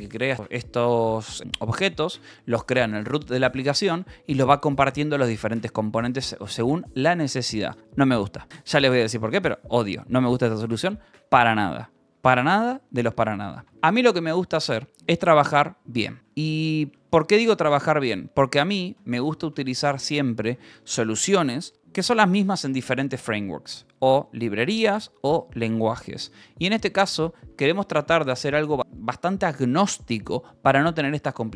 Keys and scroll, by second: 0.3 j, 6.3 Escape, 9.0-11.9 typing, 13.6 k, 15.2-20.2 typing, 15.4 Escape, 20.0 ctrl+s, 21.0 ctrl+s, 24.3 ctrl+s, 27.3 k, 31.3 Escape.